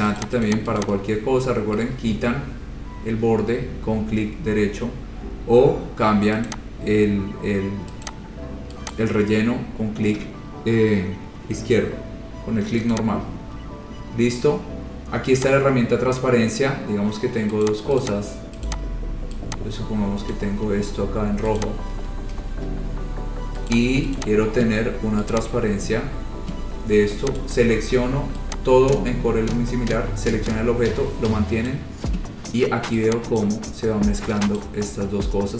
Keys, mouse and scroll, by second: 0.4 click, 0.7 click, 1.1 click, 2.0 right click, 6.7 click, 8.3 click, 9.1 click, 13.2 click, 15.6 click, 17.9 click, 18.2 click, 18.8 click, 20.6 click, 21.8 click, 22.6 Page_Down, 23.9 click, 24.4 click, 25.6 click, 26.1-26.5 scroll, 27.6 click, 31.9 click, 33.6 click, 34.8 click, 35.2-35.5 scroll.